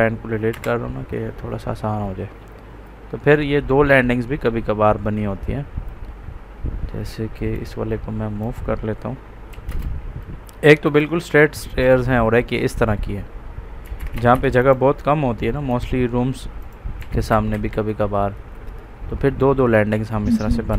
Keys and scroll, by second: 0.4 Delete, 9.4 m, 9.6 space, 12.8 Up, 13.5-14.4 typing, 16.9 1, 17.2 Escape, 18.2 Up.